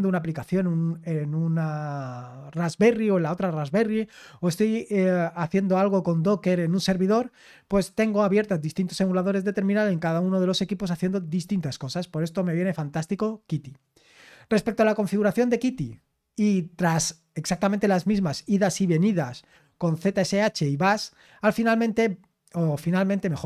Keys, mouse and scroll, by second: 14.8-15.2 scroll down 5.